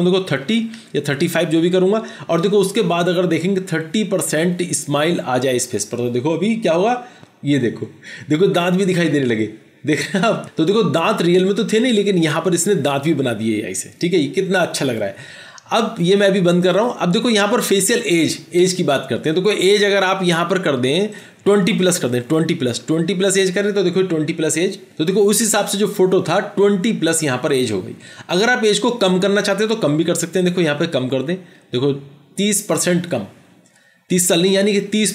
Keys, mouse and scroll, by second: 0.5-0.9 typing, 1.4 Return, 16.8 double click, 22.3 typing, 22.9 Return.